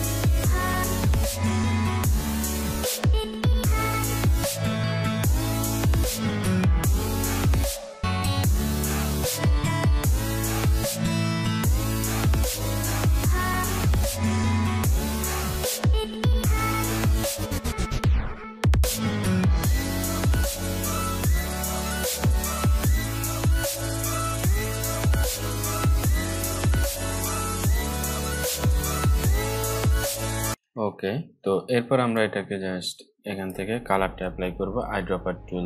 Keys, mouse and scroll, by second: 0.5 click, 1.7 alt+scroll down 1, 2.1 alt+scroll up 1, 2.3 click, 2.6 right click, 2.9-5.3 drag, 5.5 alt+scroll down 2, 5.7-6.3 scroll up 3, 6.0 click, 6.5 click, 6.7 alt+scroll up 1, 6.9-7.8 click, 7.9 scroll down 1, 8.2-9.5 drag, 10.5 scroll up 1, 11.0 click, 11.3 scroll down 1, 12.1 click, 12.6 alt+scroll down 1, 13.0 space, 13.1 click, 13.2 space, 13.7 alt+scroll up 1, 13.8-14.6 click, 15.7-16.0 alt+scroll down 3, 16.7 scroll up 2, 17.3 shift+click, 17.7 click, 17.9-19.2 alt+shift+drag, 19.8 Delete, 20.7 shift+click, 21.2 shift+Left, 21.6 click, 21.8 scroll down 1, 22.0-22.9 click, 23.3 scroll down 1, 23.4 click, 24.0 alt+scroll down 1, 24.6 click, 24.9 alt+scroll down 1, 25.2 alt+scroll up 1, 25.4 click, 25.6 shift+click, 26.7 alt+drag, 28.9 Delete, 29.1 click, 29.7 alt+scroll up 2, 29.9-30.2 alt+scroll down 2, 30.4 click, 30.5 scroll up 1, 31.7-33.2 drag.